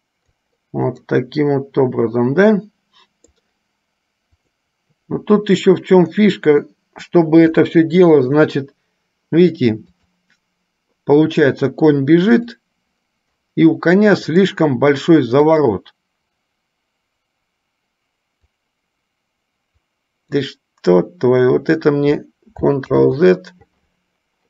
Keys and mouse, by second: 1.3-3.6 middle drag, 4.7 click, 10.1 click, 12.6 click, 15.6 click, 18.7-20.7 drag.